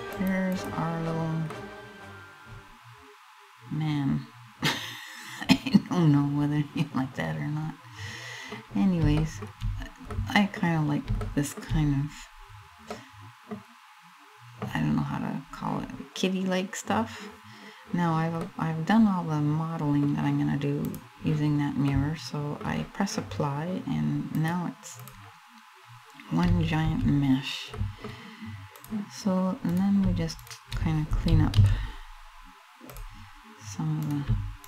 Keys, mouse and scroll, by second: 1.1 middle click, 1.8 middle click, 8.3-8.8 scroll down 1, 8.8 shift+middle click, 9.3-9.8 scroll up 2, 9.8 middle click, 10.8 shift+middle click, 12.1 scroll down 1, 12.5 middle click, 13.2-13.6 scroll up 1, 14.5 scroll up 1, 14.9-16.9 scroll down 1, 18.0 middle click, 20.6 click, 21.5 middle click, 24.6 click, 25.3 scroll down 1, 26.0 scroll down 1, 26.2 a, 26.5 a, 26.9 scroll up 2, 27.4 middle click, 28.4 click, 28.5 click, 29.3 right click, 30.0 shift+right click, 31.1 alt+m, 33.6 right click, 34.3 shift+right click.